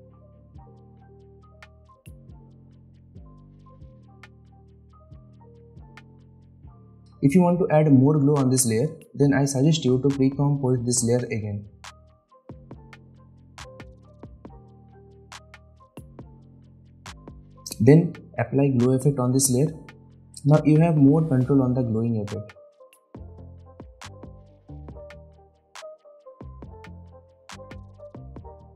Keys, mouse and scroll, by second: 0.4 typing, 2.6 typing, 3.3-4.0 scroll down 1, 4.0 click, 5.2 right click, 5.7 click, 5.7 typing, 7.7 right click, 8.9 click, 13.0 click, 18.5 click, 19.7-20.2 alt+scroll up 1, 20.2 alt+scroll down 1, 20.9 alt+scroll up 1, 22.3-25.1 drag.